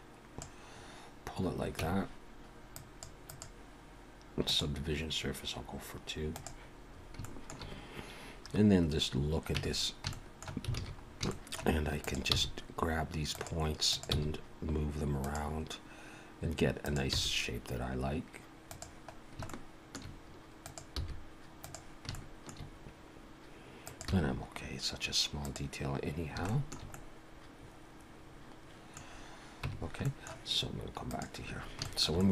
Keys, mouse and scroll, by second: 1.8 Tab, 2.7 click, 3.3 click, 6.4 click, 6.9 scroll up 2, 7.2 shift+middle click, 7.7 scroll down 2, 8.7 scroll up 1, 9.6 Tab, 10.1 shift+middle click, 10.8 alt+a, 11.0 scroll up 2, 11.3 shift+middle click, 12.0 click, 12.3 g, 13.9 click, 14.1 g, 16.8 click, 17.1 g, 19.5 shift+middle click, 20.6 click, 21.0 g, 22.2 shift+middle click, 23.9 click, 24.1 g, 26.5 shift+middle click, 26.9 middle click, 29.0-29.5 scroll down 4, 29.7 Tab, 30.0 middle click, 31.0 click, 31.6 scroll up 2, 31.8 shift+middle click, 32.2 middle click.